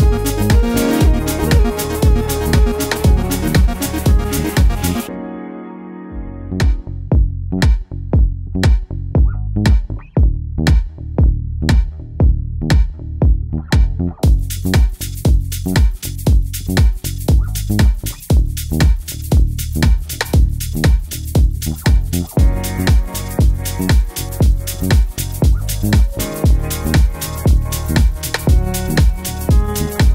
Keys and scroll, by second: 15.7 super+Up, 22.5 super+z.